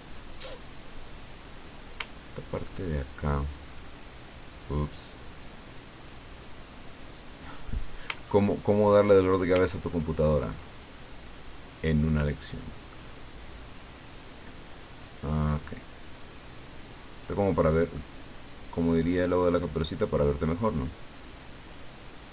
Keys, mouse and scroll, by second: 2.5-3.1 ctrl+scroll up 2, 8.2-8.6 ctrl+scroll down 2, 9.7-10.4 ctrl+scroll up 2, 12.9-15.4 middle drag, 17.9-19.1 middle drag, 20.8-22.3 drag.